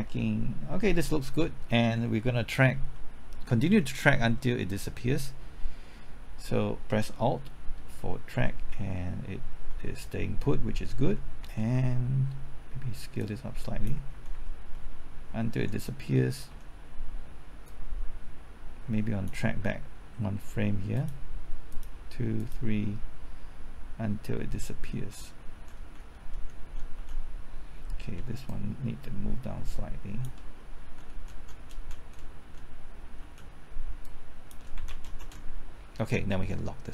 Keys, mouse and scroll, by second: 2.6-2.9 scroll up 1, 2.9 middle click, 3.6-4.0 scroll up 1, 4.0-5.3 middle drag, 7.2 typing, 7.9 alt+Right, 8.3-9.0 typing, 10.6-11.4 typing, 13.2 click, 13.9-15.1 typing, 14.1 alt+Right, 14.8 alt+Right, 16.5 Left, 17.7-19.3 drag, 25.1 Right, 25.5-28.7 typing, 28.5 shift+click, 30.8 shift+Right, 31.1 Left, 31.1-31.7 typing, 31.7 Right, 31.9 Left, 32.2 Right, 33.2 Left, 33.5-34.2 typing, 34.0 shift+click, 34.7 shift+Right, 34.9 shift+Left, 35.0 shift+Right, 35.2 shift+Left.